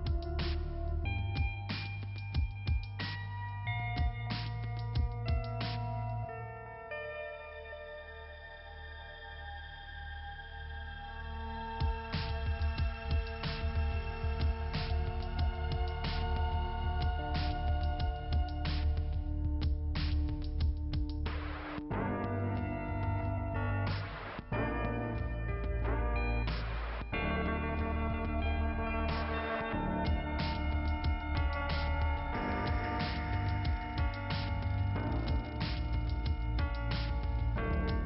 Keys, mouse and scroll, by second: 0.4 click, 1.7 click, 4.1 click, 5.5 click, 5.6 click, 6.6 click, 7.5 click, 8.3 right click, 8.9 click, 9.8 click, 11.0 click, 11.8 click, 12.2-12.6 scroll down 3, 12.5 click, 13.2 click, 13.3 click, 14.3 click, 16.2 click, 19.2 click, 20.0 click, 20.9 click, 21.8 scroll up 2, 22.8 click, 23.5 click, 24.4 click, 26.4 click, 29.1 click, 30.0 click, 31.2 click, 32.3 click, 33.9 click, 35.6 click.